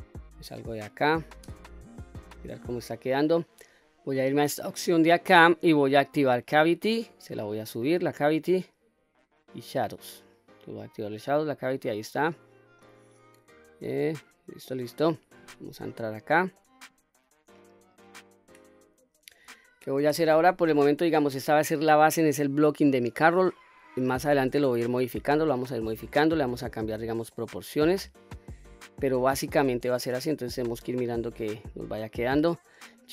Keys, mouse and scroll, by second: 1.4 Tab, 2.1-3.4 middle drag, 4.8-11.9 drag, 12.8-15.0 middle drag, 15.4 Tab, 16.0-16.6 scroll up 2, 16.6-19.4 middle drag, 20.1 Tab, 20.7 scroll down 1, 20.8 middle click, 21.4-22.0 middle drag, 22.4-23.6 middle drag, 24.0-24.5 middle drag, 25.0-25.5 middle drag, 25.9-27.3 middle drag, 27.8-28.6 middle drag, 29.3-29.8 middle drag, 30.4-32.9 middle drag.